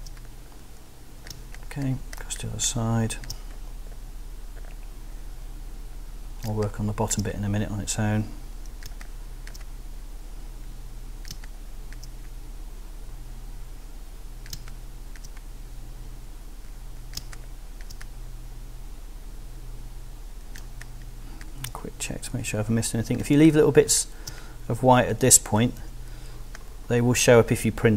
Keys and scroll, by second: 1.3 space, 6.5 space, 8.8 space, 11.3 space, 14.5 space, 17.2 space, 20.6 space, 23.2 space, 25.8 b, 27.3 space.